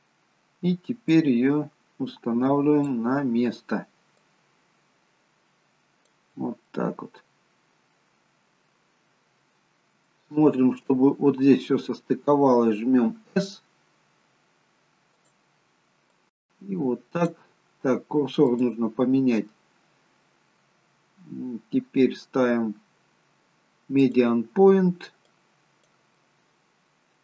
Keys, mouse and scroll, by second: 1.2 click, 6.8 middle click, 9.5-10.1 scroll up 4, 10.2 shift+middle click, 13.0 s, 16.2 click, 18.4 click, 25.3 click, 26.1 middle click.